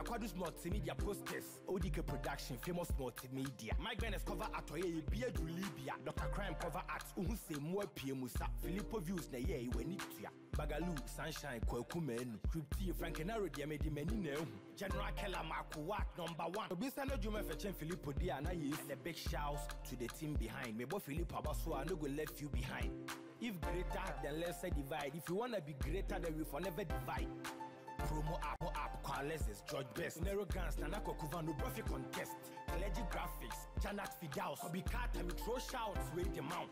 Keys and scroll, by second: 34.7 ctrl+t.